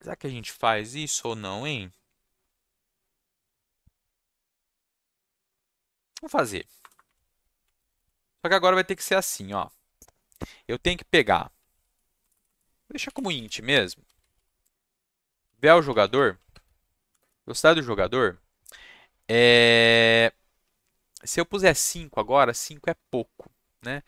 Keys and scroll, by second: 6.8 Return, 6.9 Return, 7.0 Up, 7.6 Up, 7.7 Down, 11.3-17.2 typing.